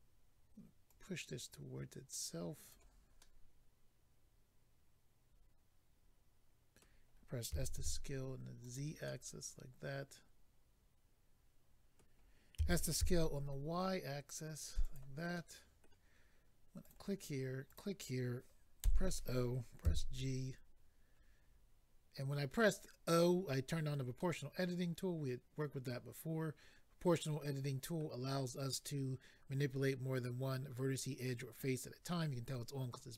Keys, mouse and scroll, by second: 0.8 click, 3.2 middle click, 7.5-9.0 typing, 8.6 click, 9.0 middle click, 12.5-13.2 typing, 14.8 click, 15.3 middle click, 16.8 click, 17.7 click, 18.8 click, 18.8 o, 19.8 g, 21.1-21.5 scroll down 4, 22.6 click, 24.2 middle click.